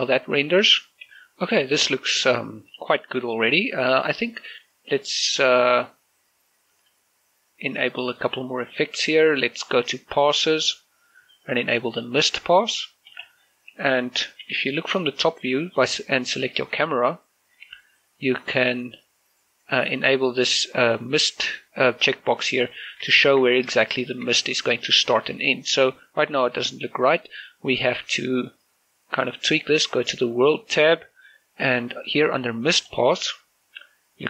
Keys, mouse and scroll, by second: 0.1-0.5 scroll up 1, 2.8 middle click, 3.4 scroll up 1, 3.9 scroll down 1, 4.1 middle click, 4.4 scroll up 1, 4.5-6.9 shift+middle drag, 6.9 click, 14.2-15.3 scroll down 1, 15.3-15.9 scroll up 1, 15.9 right click, 18.3 click, 22.7 click, 23.2 shift+middle click, 23.6 scroll down 1, 23.9 shift+middle click, 24.7 scroll down 1, 24.9 shift+middle click, 29.6 click, 32.9-34.2 drag.